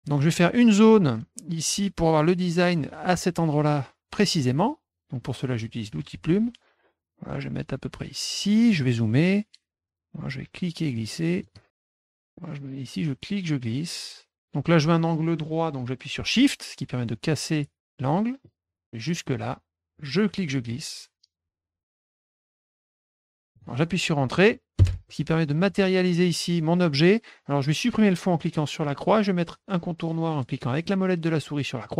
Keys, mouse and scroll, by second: 5.9 click, 8.3 click, 8.7 middle click, 8.9 middle click, 9.0 middle click, 10.2-11.4 drag, 11.7 middle click, 12.8-17.8 drag, 18.4 middle click, 20.1-22.5 drag, 23.0 middle click, 23.5 click, 24.7 Return, 25.6 middle click, 28.8 click.